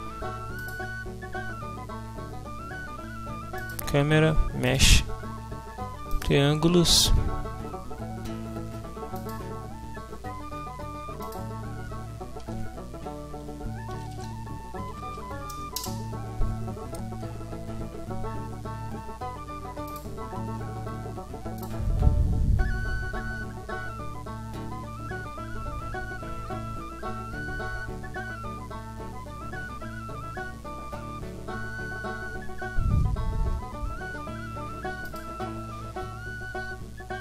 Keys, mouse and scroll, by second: 0.6 click, 3.6 click, 4.6 shift+click, 6.1 click, 11.2 click, 13.7-14.9 typing, 15.0 Down, 16.0 Return, 19.9 click, 21.6-23.1 drag, 35.0 click.